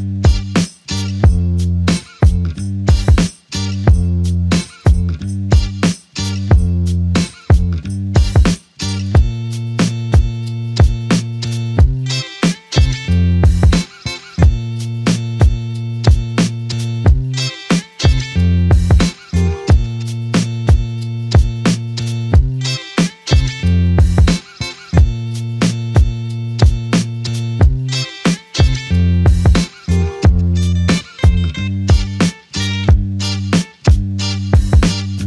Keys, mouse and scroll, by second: 2.3 f, 3.4 double click, 6.1 f, 7.0 double click, 12.1 f, 13.1 alt+click, 16.3 double click, 16.8 alt+click, 20.1 f, 23.2 double click, 28.6 alt+click, 30.8 double click, 31.8 alt+click, 33.3 double click.